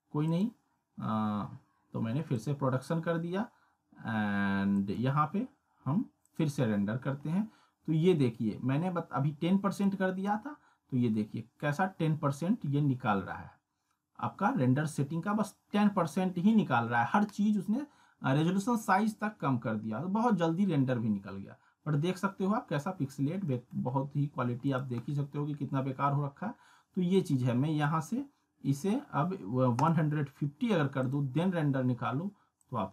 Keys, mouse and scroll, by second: 5.4 click, 9.8-10.4 click, 15.8-16.1 scroll down 1, 19.4 scroll down 1, 20.9 scroll up 1, 23.5 middle click, 23.9 scroll down 1, 24.7 click, 25.0-25.4 scroll down 1, 27.1 click.